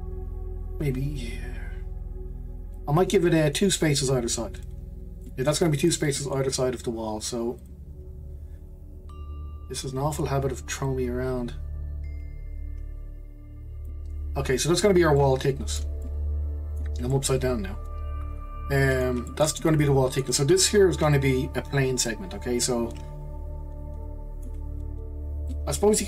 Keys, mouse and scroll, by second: 5.0 scroll down 3, 5.2 middle click, 5.8 click, 6.1-7.6 middle drag, 7.6 click, 8.7-9.2 scroll down 2, 9.2-10.6 scroll up 7, 10.6 scroll up 1, 10.9 click, 14.3-15.2 scroll down 2, 15.2-25.2 middle drag, 25.5-26.0 middle drag.